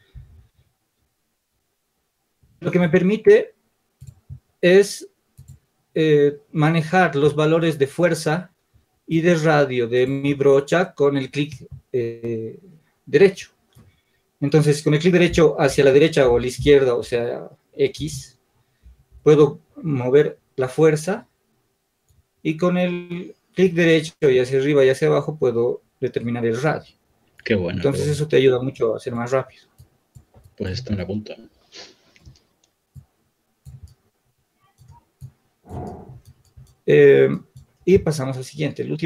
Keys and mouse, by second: 30.7-39.0 drag.